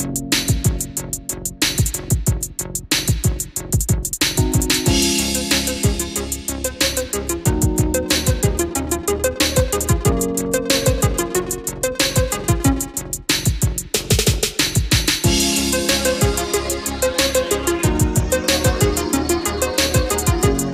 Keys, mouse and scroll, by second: 0.9 click, 1.7-3.1 middle drag, 3.2 click, 10.3-11.2 scroll down 1, 11.2-14.0 drag, 14.4 middle click, 15.6-16.0 scroll up 1, 16.0 click, 18.5 ctrl+click.